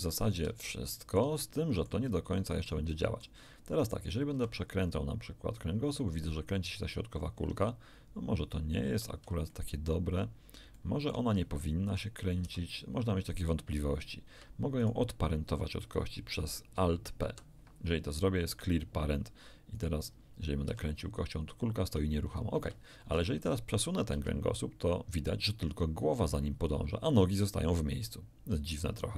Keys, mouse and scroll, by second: 0.7-3.4 shift+middle drag, 3.9 shift+right click, 4.3 shift+r, 8.5-8.9 scroll up 2, 8.8 Escape, 9.5 middle click, 10.1-10.4 scroll up 1, 10.7 shift+middle click, 11.9 middle click, 12.4 r, 14.3 Escape, 14.8 right click, 17.3 alt+p, 18.7 click, 19.7 click, 20.7 r, 22.5 Escape, 23.1 middle click, 23.1 scroll down 1, 24.1 g.